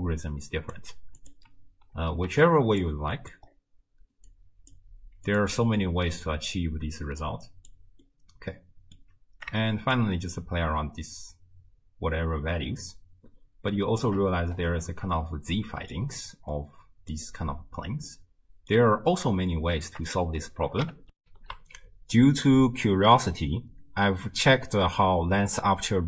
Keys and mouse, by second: 1.2 click, 2.0 ctrl+h, 2.5 click, 3.2 click, 3.2 middle click, 4.3 click, 5.3 click, 6.9 x, 7.3 click, 8.0 middle click, 10.0-13.5 shift+drag, 13.5 shift+middle click, 15.3-16.0 middle drag, 16.6 middle click, 18.3-18.8 middle drag, 19.5 shift+middle click, 21.2 ctrl+alt+shift+w, 21.5 ctrl+alt+shift+q.